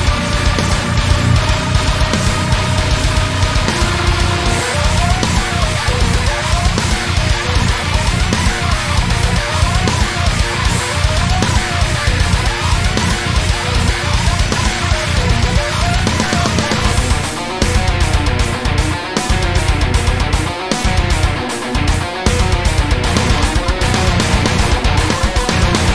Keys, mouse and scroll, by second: 1.8 click, 2.0 Tab, 2.1 scroll down 1, 2.6 scroll up 1, 3.1 scroll down 1, 3.4-6.1 middle drag, 3.7 scroll down 1, 4.2 scroll up 1, 5.1 ctrl+a, 6.1 click, 6.4 Tab, 6.6-6.9 scroll up 1, 6.9-9.8 shift+middle drag, 8.1 Tab, 10.0 click, 10.7-13.9 shift+middle drag, 12.0 scroll down 2, 12.9 scroll down 2, 13.5-13.9 scroll up 2, 13.9 click, 14.5-14.8 scroll down 2, 14.8 Tab, 15.2 click, 15.8 l, 16.7 shift+click, 17.9 l, 18.4-19.6 shift+middle drag, 19.6 l, 19.8 scroll down 1, 20.3-20.7 scroll up 1, 20.7 middle click, 21.1-21.7 scroll down 2, 21.3 `, 21.7 z, 22.2 shift+middle click, 22.4-23.0 scroll up 2, 22.7 shift+middle click, 23.6-25.0 middle drag, 23.6 s, 25.0 right click, 25.4 s.